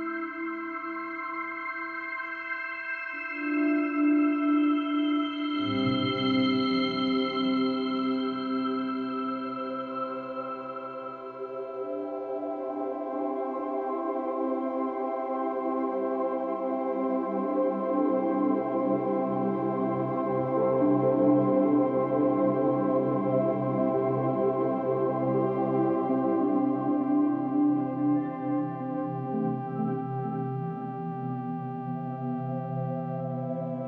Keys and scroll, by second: 17.0 Delete, 25.1 space, 25.4 space.